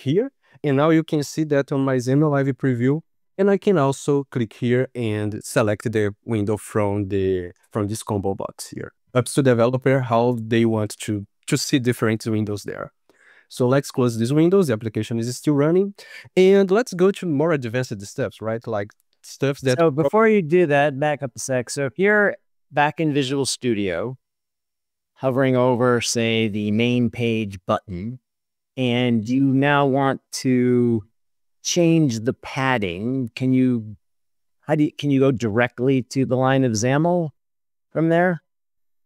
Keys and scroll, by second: 0.0 ctrl+s, 13.6 ctrl+s.